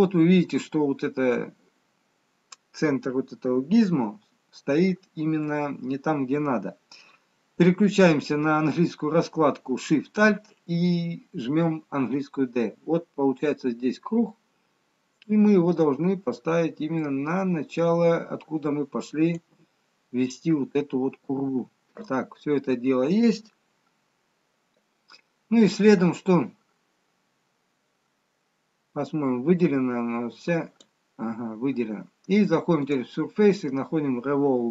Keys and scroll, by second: 12.1 d.